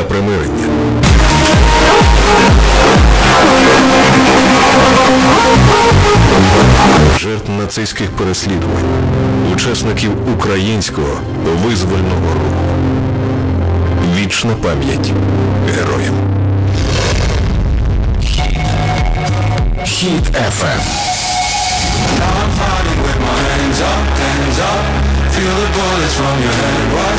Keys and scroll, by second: 7.8 Page_Down.